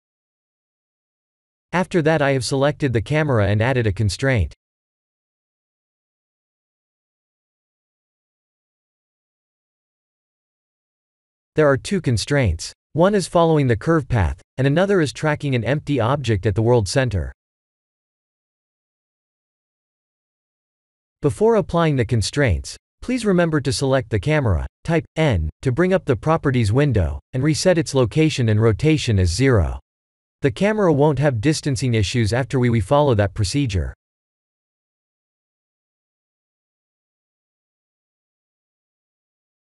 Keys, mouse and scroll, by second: 2.1 click, 2.7 x, 4.8 click, 6.5 click, 7.4-8.0 scroll down 4, 8.0-8.5 scroll down 1, 10.7-12.5 scroll up 2, 16.6 click, 17.5-18.4 scroll down 4, 18.4 middle click, 18.4 scroll down 1, 23.3 click, 24.5 click, 26.3 click, 35.0 click, 36.2 click, 38.1 click.